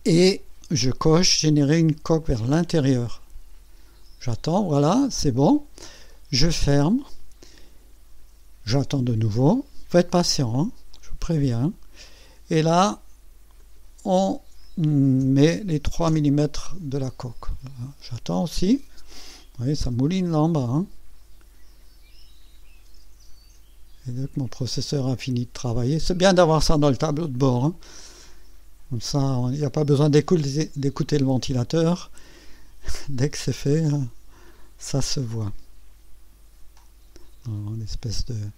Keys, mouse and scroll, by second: 2.4 click, 6.7 click, 12.0 click, 13.6 click, 15.2 KP_3, 16.1 KP_Enter, 33.1 scroll up 2, 34.0 right click.